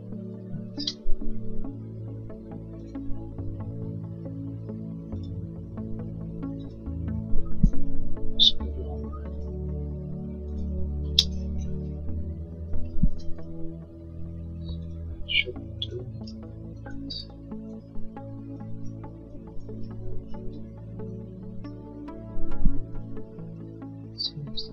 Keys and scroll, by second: 0.2 Escape, 7.8 l, 11.0 space, 13.3 l, 16.8 e, 22.9 l.